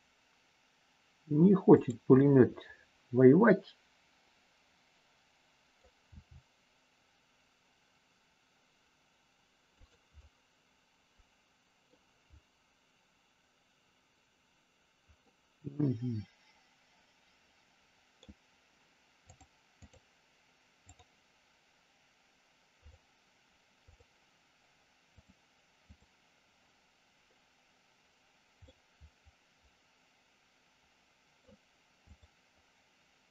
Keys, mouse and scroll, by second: 2.2 scroll up 1, 2.4-5.8 middle drag, 6.0 g, 9.8 click, 10.2 scroll up 1, 10.4-11.9 middle drag, 15.2-18.1 middle drag, 19.4 click, 20.9 click, 22.8 click, 25.1 click, 28.8-31.4 middle drag, 32.0 click.